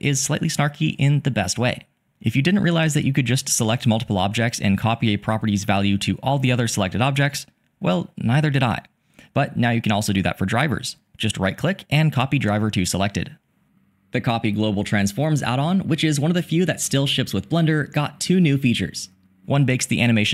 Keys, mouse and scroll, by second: 3.1 shift+click, 8.7-10.9 drag, 12.1 click, 12.8 click.